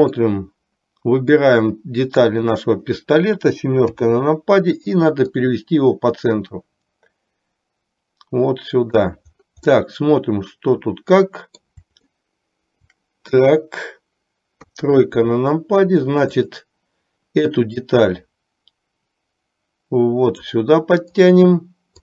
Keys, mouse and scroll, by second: 1.5-2.5 drag, 4.0 KP_7, 5.4-9.2 drag, 9.9-11.7 middle drag, 12.4-13.5 shift+middle drag, 14.7 KP_3, 16.4 click, 18.1-20.6 drag.